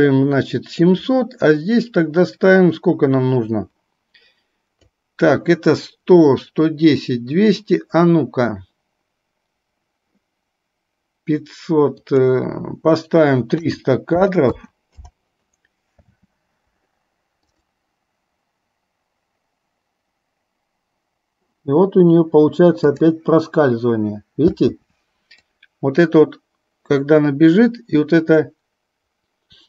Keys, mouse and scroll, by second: 1.6-4.9 drag, 12.3-15.1 drag, 16.2 space, 17.7 click, 22.9 click, 24.6 space, 25.6-29.6 drag.